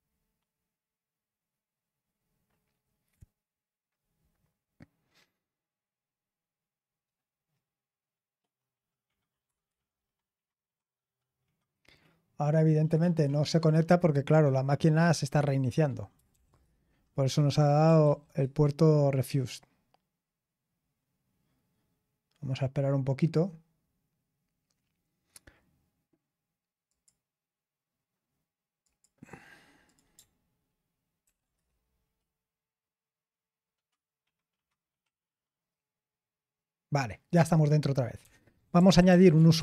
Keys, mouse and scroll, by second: 9.4 Return, 16.3 ctrl+p, 16.6 Return, 18.0 ctrl+p, 18.4 Return, 26.9 click, 28.8 click, 29.8 click, 31.2 ctrl+p, 31.5 Return, 37.9-39.6 typing.